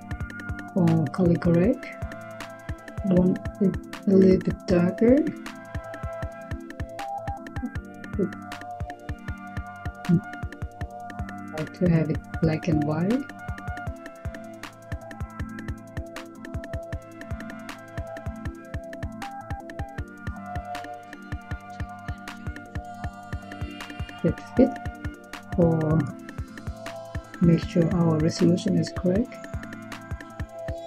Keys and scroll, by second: 9.1 Tab, 10.6-11.0 typing, 22.0 Tab, 23.2-24.4 typing.